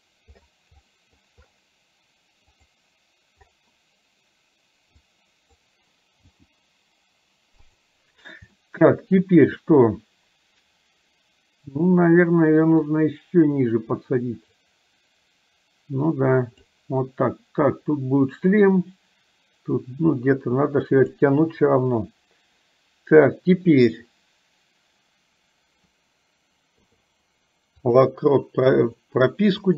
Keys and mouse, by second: 0.9 middle click, 2.5 click, 5.1 click, 8.6 middle click, 12.9 click, 13.3-16.9 drag, 18.9-21.5 drag, 29.6-29.7 drag.